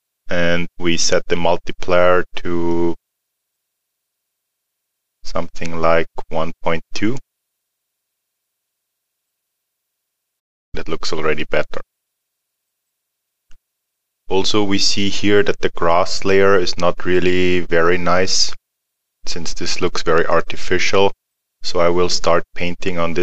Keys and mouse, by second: 2.7 click, 9.8 alt+middle click, 12.9 middle click.